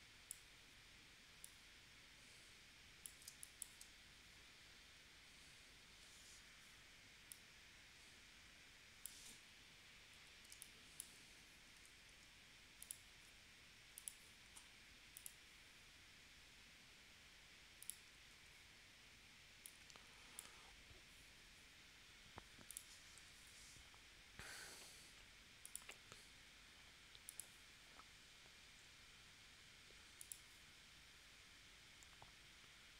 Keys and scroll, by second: 3.3 space, 10.5 space, 11.7 a, 23.4 p.